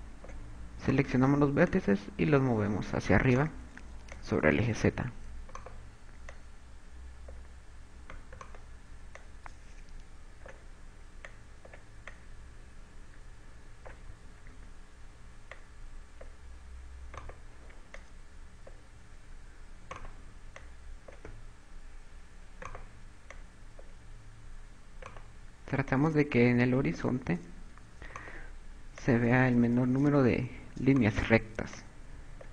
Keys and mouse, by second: 0.5 click, 1.7 right click, 2.6 click, 4.1 right click, 5.1 click, 7.3 click, 9.3 right click, 10.1 click, 12.2 click, 13.1 click, 15.1 ctrl+z, 16.5 click, 17.9 right click, 18.9 click, 20.7 right click, 21.5 click, 23.6 right click, 24.3 click, 26.0 right click, 26.9 click, 28.9 right click, 29.8 click, 31.9 right click.